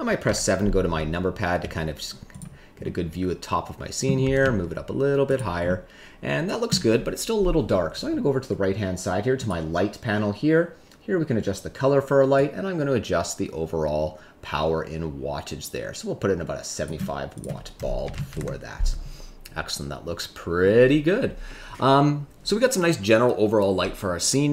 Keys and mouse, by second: 0.7 KP_7, 1.6 s, 2.8-4.0 middle drag, 4.2 g, 4.4 z, 5.2 click, 5.6-6.7 middle drag, 9.3 click, 12.4-16.8 drag, 17.3-18.3 drag.